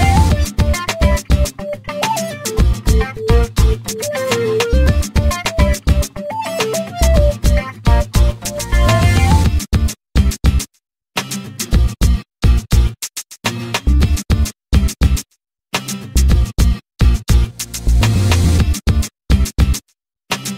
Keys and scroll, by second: 4.2 l, 10.8 6, 18.5 1, 20.0 Return.